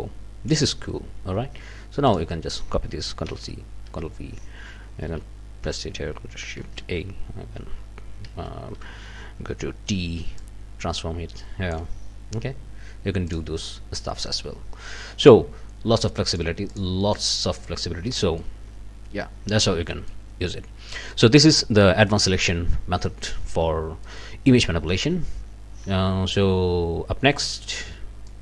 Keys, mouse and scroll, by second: 2.1 middle click, 3.3 ctrl+c, 3.9 ctrl+v, 4.2-6.6 ctrl+drag, 5.1 v, 6.8 ctrl+shift+a, 8.2 v, 9.9 t, 10.4-11.9 drag, 13.3 click, 14.3 click, 16.3 click, 16.7 middle click, 18.2 middle click, 19.5 scroll down 1, 19.9 middle click, 20.6 scroll up 2, 20.9 middle click, 23.5 scroll down 2, 24.1 middle click, 28.3 click.